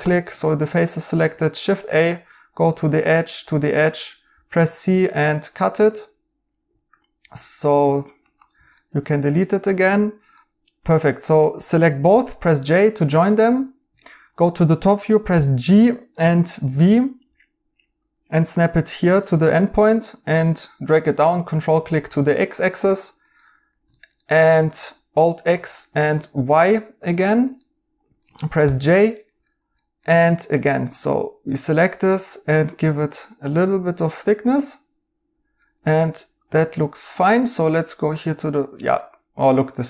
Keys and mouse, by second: 4.2 right click, 4.2 c, 5.8 Tab, 7.1-8.7 typing, 8.7 right click, 11.5 Tab, 12.0 j, 12.2 right click, 13.9 right click, 15.3 g, 16.2 v, 19.2 right click, 22.6 right click, 25.1 alt+x, 25.5-26.1 typing, 25.8 right click, 27.2 right click, 28.6 j, 28.9 right click, 30.8 Tab, 34.6 right click, 36.8 right click, 38.3 right click.